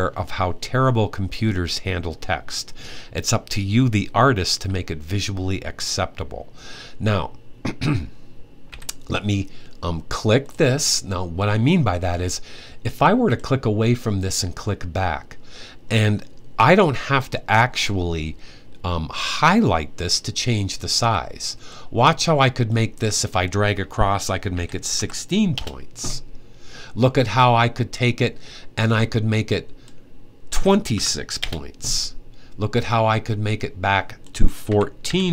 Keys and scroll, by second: 8.4 t, 24.3-24.7 typing, 30.3-30.7 typing, 34.4-34.8 typing.